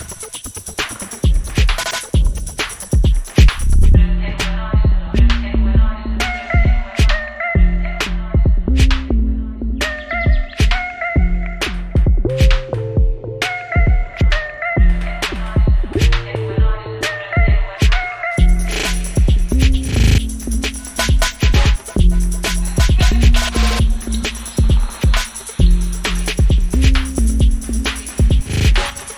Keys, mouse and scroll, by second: 0.9 typing, 1.8 click, 2.4 scroll down 1, 4.2 ctrl+click, 4.9-5.9 scroll down 1, 6.2 ctrl+click, 6.5-7.1 scroll down 1, 7.3 ctrl+click, 7.5-8.4 scroll down 1, 8.8 ctrl+click, 9.0-10.2 scroll down 1, 10.3-11.2 typing, 11.3 Return, 12.2 scroll up 1, 13.2-16.2 drag, 17.5-19.1 typing, 19.4 click, 22.3-25.1 drag, 25.7 3, 25.9 Return, 26.6-29.1 drag.